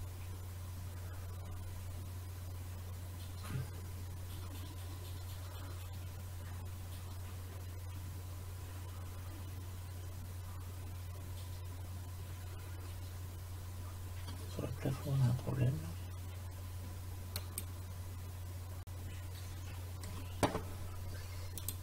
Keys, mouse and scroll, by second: 17.5-19.4 drag, 21.7-21.8 drag.